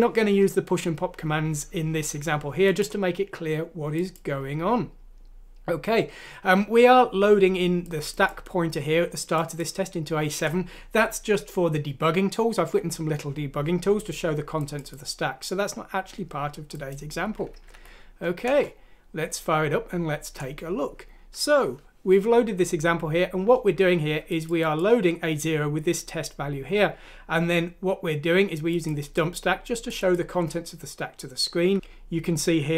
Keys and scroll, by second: 17.7 F6, 18.4 Return.